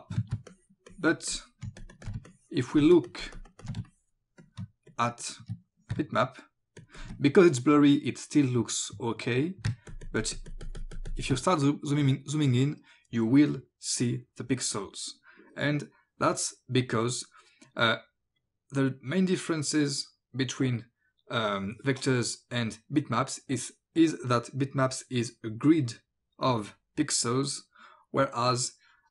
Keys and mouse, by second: 0.4 space, 0.5 click, 0.9 click, 1.3 click, 1.5 space, 2.1 click, 2.3 click, 2.5 space, 3.9 click, 4.4 click, 4.6 ctrl+space, 5.2 ctrl+click, 6.0 ctrl+space, 9.7 space, 9.9 ctrl+click, 10.2 ctrl+click, 10.6 click, 11.3 space.